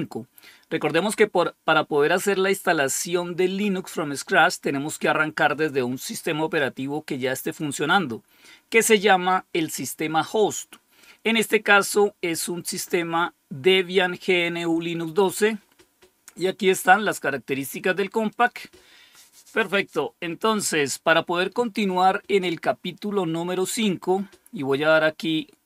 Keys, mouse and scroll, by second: 18.2 click.